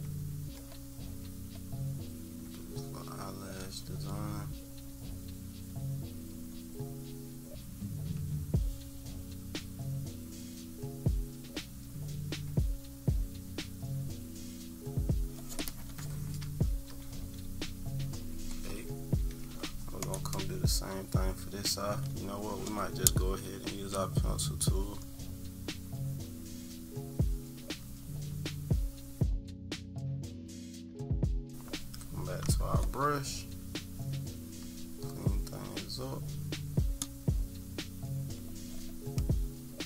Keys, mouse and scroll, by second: 1.8-15.2 drag, 17.0-19.2 typing, 17.7 middle click, 18.1 middle click, 18.6 scroll down 1, 19.6-20.0 scroll down 2, 23.8-31.1 drag, 32.5 click, 34.1-38.4 drag.